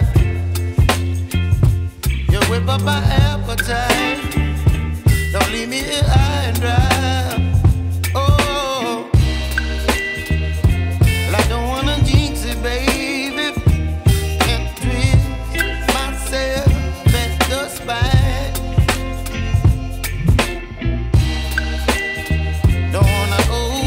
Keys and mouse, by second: 0.8 ctrl+z, 1.5 ctrl+space, 1.8 ctrl+click, 2.0 ctrl+space, 4.6 ctrl+space, 4.7 ctrl+click, 7.0 ctrl+space, 7.2 ctrl+click, 7.5 ctrl+space, 7.7 ctrl+click, 14.5 ctrl+click, 17.9 ctrl+j, 22.2 ctrl+shift+a.